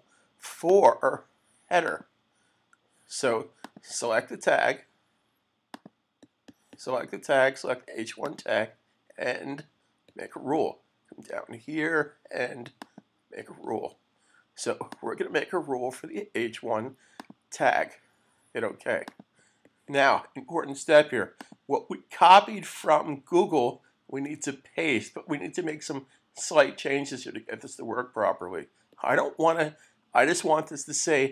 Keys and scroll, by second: 27.5 super+v.